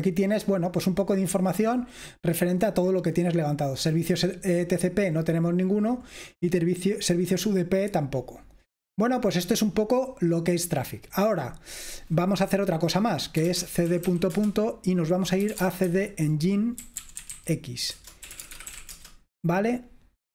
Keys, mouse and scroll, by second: 0.0 click, 2.4-3.6 scroll down 2, 3.6-4.0 scroll down 1, 4.0-5.3 scroll up 2, 5.3-7.5 scroll down 2, 7.5-8.8 scroll down 1, 8.8-11.2 scroll up 1, 11.2-11.7 scroll up 1, 11.7 click, 13.3-19.3 typing.